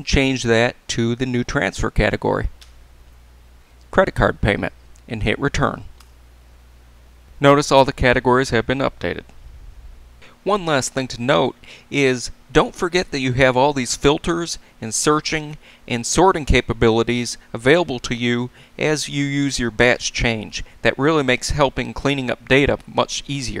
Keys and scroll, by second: 3.0 shift+;, 6.0 Return.